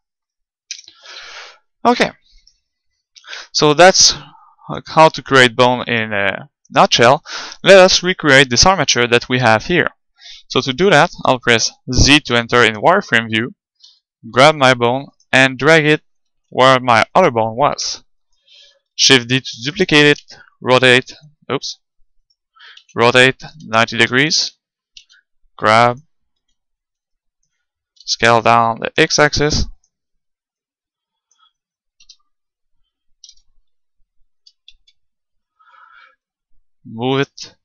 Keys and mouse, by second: 0.7 Tab, 2.4-4.1 right drag, 3.2 Delete, 4.4-7.2 middle drag, 5.9-7.6 right drag, 7.4-8.9 middle drag, 11.7 z, 12.2 middle click, 13.9 g, 15.0 middle click, 15.3-18.9 drag, 16.6 g, 18.9 middle click, 18.9 shift+d, 19.9-21.4 drag, 20.3 r, 22.3-24.0 right drag, 22.8 r, 24.4-27.8 drag, 25.0 g, 27.2 middle click, 27.8-28.8 middle drag, 28.0 s, 29.9-32.3 drag, 32.1 KP_3, 33.3 KP_1, 34.4 KP_3, 34.8 KP_Decimal, 36.3-37.6 drag.